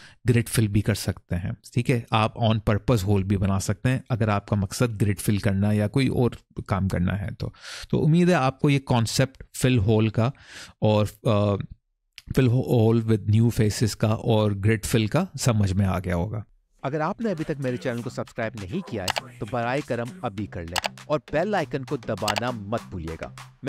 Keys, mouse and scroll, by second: 0.8 scroll up 1, 1.3-3.4 scroll down 1, 3.4 middle click, 7.0-7.5 scroll up 1, 7.5-9.0 scroll down 3, 9.0 middle click.